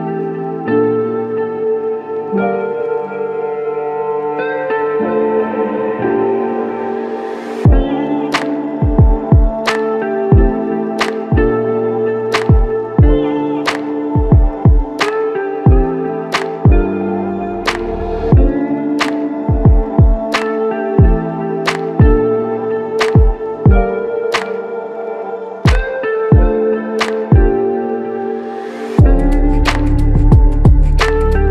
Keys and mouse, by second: 6.7 double click, 10.0 double click, 11.2 alt+click, 14.2-16.0 typing, 17.2 alt+click, 20.5 alt+click.